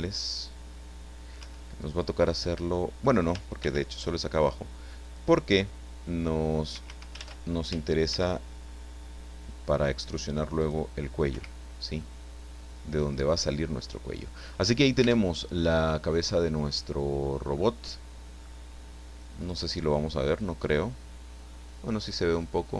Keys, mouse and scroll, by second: 1.4 Escape, 2.2 click, 3.6 ctrl+r, 5.0 click, 6.7 Escape, 7.2 ctrl+z, 8.1 ctrl+r, 8.6 ctrl+scroll up 3, 9.8 scroll up 2, 10.6 click, 11.3 Escape, 11.7-12.0 scroll down 1, 12.0-15.1 middle drag, 15.0 Tab, 15.5-17.7 middle drag, 19.4 click, 20.4 click.